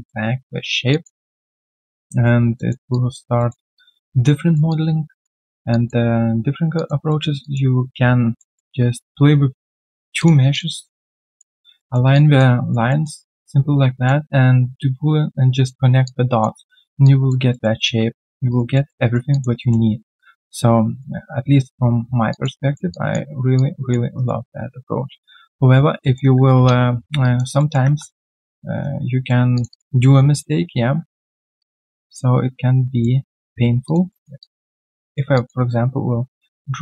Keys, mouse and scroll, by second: 1.2 alt+middle click, 1.6 alt+click, 2.5 alt+middle click, 2.9 alt+click, 3.3 alt+middle click, 3.7 alt+click, 4.4 alt+right click, 4.6 alt+click, 5.7 alt+click, 6.7 alt+click, 7.0 alt+middle click, 7.4 alt+click, 8.3 alt+middle click, 11.0 double click, 11.7 alt+middle click, 12.1 alt+click, 12.6 alt+right click, 12.9 alt+middle click, 13.2 alt+click, 16.0 alt+click, 16.6 alt+middle click, 17.0 alt+click, 17.5 alt+middle click, 17.8 alt+click, 18.5 alt+right click, 18.7 alt+middle click, 19.0 alt+right click, 19.3 alt+click, 19.6 alt+middle click, 21.5-22.0 alt+scroll down 1, 22.3 alt+click, 22.6 alt+middle click, 22.9 alt+click, 24.1 alt+right click, 26.0 alt+middle click, 26.5 alt+middle click, 27.2 alt+right click, 27.6 alt+middle click, 27.8 w, 28.8 right click, 29.7 double click, 30.7 scroll down 1, 30.9 typing, 31.9 alt+right click, 33.0 middle click, 33.3 typing, 33.6 scroll down 1, 34.1 alt+middle click, 34.4 alt+click, 34.7 right click, 35.3 alt+click.